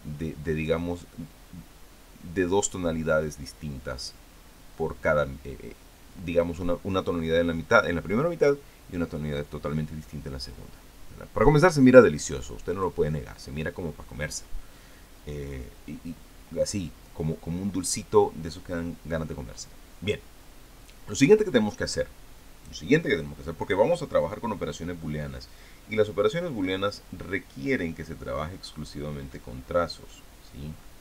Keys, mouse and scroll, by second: 13.6 click.